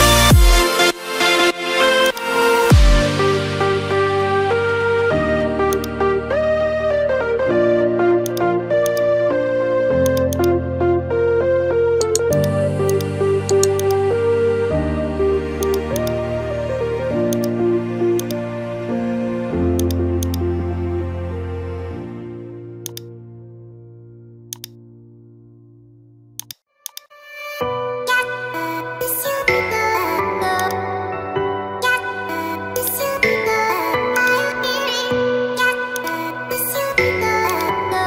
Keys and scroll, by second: 21.8 ctrl+t, 28.8 Return.